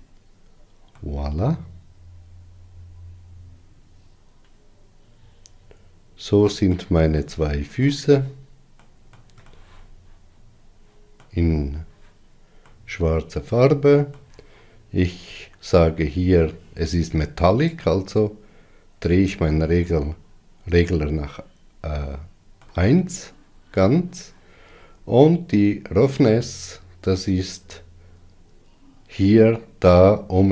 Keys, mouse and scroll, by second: 2.3-5.5 middle drag, 8.2-18.7 shift+middle drag, 18.7-21.8 drag, 21.8-28.7 middle drag, 28.7-30.5 drag.